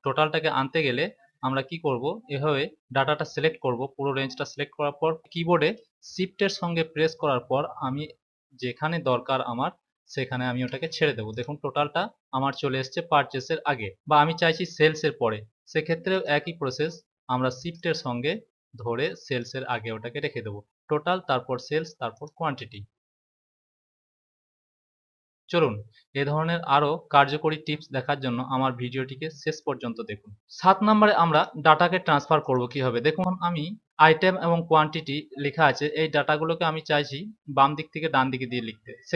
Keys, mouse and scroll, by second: 2.8 click, 11.2 click, 16.0 click, 22.0 click, 31.3 click.